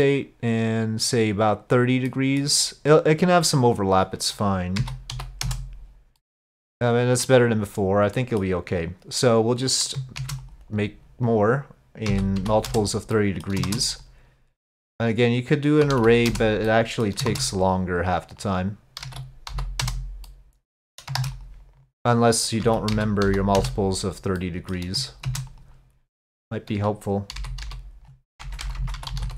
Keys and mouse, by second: 2.1 middle click, 4.1-5.9 drag, 6.2-7.4 middle drag, 8.3-9.9 middle drag, 10.2 shift+d, 11.3-12.9 drag, 13.2 middle click, 13.7 shift+d, 15.1-16.4 drag, 16.7 middle click, 17.3 shift+d, 18.5-19.9 drag, 20.3 middle click, 21.2 shift+d, 22.3-23.7 drag, 24.4 middle click, 25.3 shift+d, 26.4-29.3 drag, 28.6 BackSpace, 28.8 BackSpace.